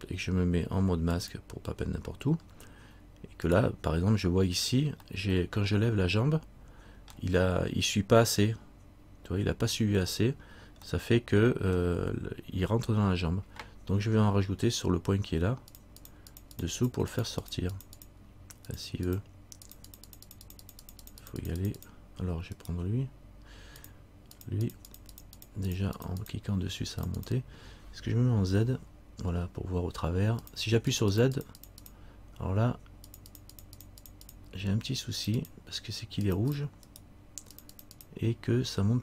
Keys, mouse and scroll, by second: 1.3 click, 2.6 scroll up 1, 3.7 right click, 3.7-4.5 scroll up 1, 5.7 middle click, 11.1 middle click, 15.9-22.7 click, 22.7 right click, 24.0 click, 25.4 click, 27.5 click, 28.8 z, 30.6-37.1 click, 37.1 right click, 37.7 click.